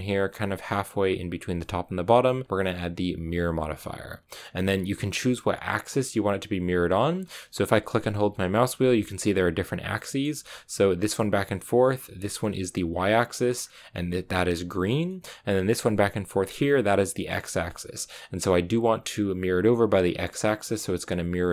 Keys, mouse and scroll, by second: 5.2-7.1 drag, 7.1-7.8 scroll down 3, 7.8 middle click, 8.7-9.8 scroll down 1, 9.8-12.8 middle drag, 12.8-13.5 scroll up 1, 13.5-15.0 scroll down 2, 15.0-17.1 middle drag, 17.1 scroll up 4, 19.9-21.5 drag.